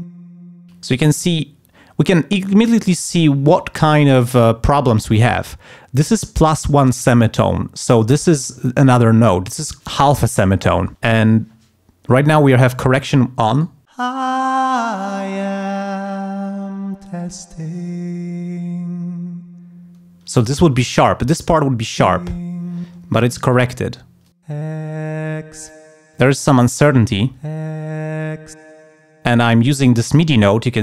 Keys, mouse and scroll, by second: 0.1 space, 13.5 click, 14.0 space, 20.2 space, 21.8 click, 22.1 space, 23.0 space, 24.2 click, 24.5 space, 25.9 space, 26.3 click, 27.1 space, 28.7 space.